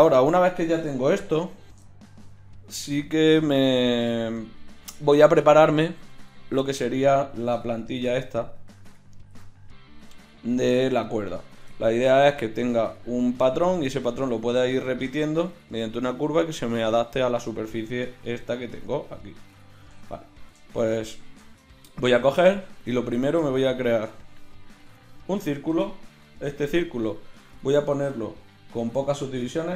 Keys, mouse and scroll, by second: 1.1 shift+c, 9.4 drag, 18.3-20.7 drag, 20.7-21.1 middle drag, 21.1-22.7 drag, 22.7 shift+a, 26.5 F6.